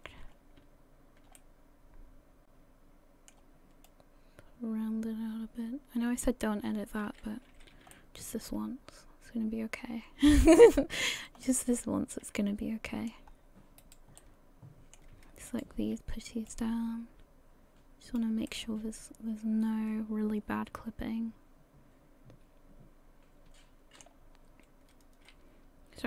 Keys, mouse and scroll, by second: 0.3 scroll up 2, 1.4 middle click, 3.9 click, 7.5 a, 7.7 a, 7.9 middle click, 11.0-11.4 scroll up 2, 11.4 middle click, 13.3 scroll up 1, 13.8 right click, 14.2 middle click, 15.5 shift+right click, 16.5 click, 18.5 middle click.